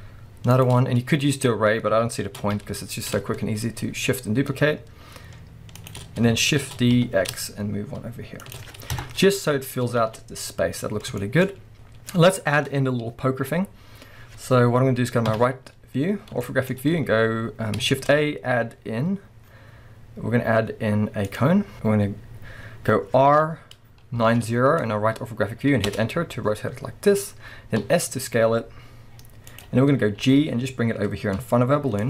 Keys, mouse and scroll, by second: 0.6 shift+click, 0.9-1.3 scroll up 1, 1.3 click, 2.4 shift+d, 5.9 shift+click, 6.1-6.7 scroll down 1, 6.7 shift+d, 8.6 shift+click, 8.9 KP_0, 9.8 scroll up 1, 10.0 alt+a, 10.5-11.2 scroll down 1, 11.2 shift+middle click, 11.5 scroll up 1, 11.7 KP_0, 15.3 middle click, 15.3 KP_3, 16.1-16.4 scroll up 2, 16.4-16.7 shift+middle drag, 16.7-17.9 scroll up 2, 17.9 shift+a, 21.7-22.8 scroll up 2, 22.8-23.3 scroll down 2, 23.3 r, 26.6-27.8 scroll up 2, 27.8 s, 29.6 click, 29.7 scroll up 1, 30.2 g.